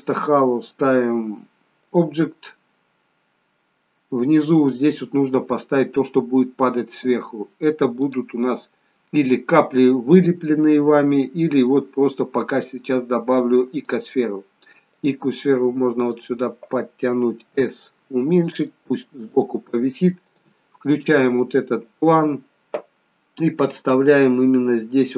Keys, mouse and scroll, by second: 0.1 click, 2.5-3.2 scroll down 3, 3.2-4.1 scroll down 2, 8.0 click, 15.0 click, 17.5 s, 20.3 click, 23.0-24.2 scroll down 6, 24.2-25.1 scroll down 3.